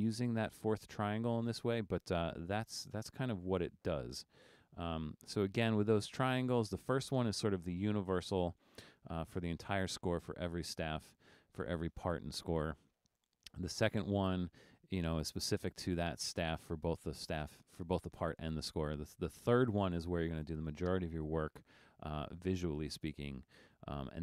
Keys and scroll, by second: 6.6 BackSpace.